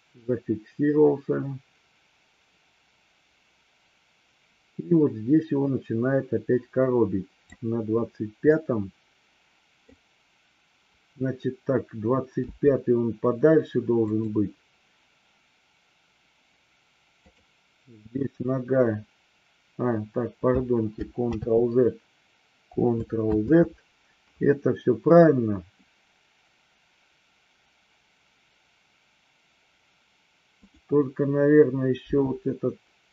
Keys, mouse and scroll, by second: 8.4-9.8 middle drag, 12.3 g, 14.1 click, 21.2 ctrl+z, 23.2 ctrl+z, 32.1 g.